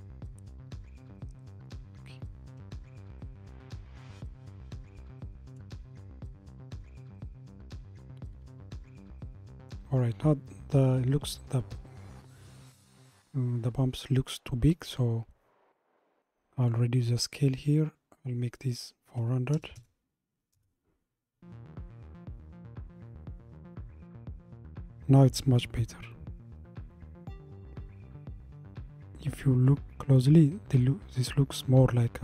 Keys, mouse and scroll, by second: 0.4-6.0 middle drag, 7.2-10.2 middle drag, 16.6-19.8 drag, 21.3 KP_0, 26.1-26.8 scroll up 2.